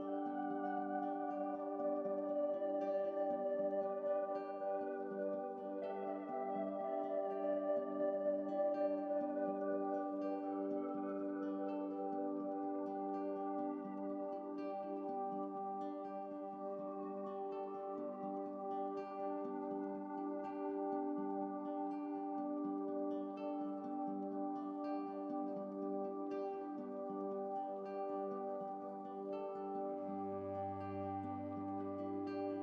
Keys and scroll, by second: 15.9 ctrl+t, 18.1 ctrl+t, 32.1 ctrl+z, 32.2 ctrl+z, 32.4 ctrl+z.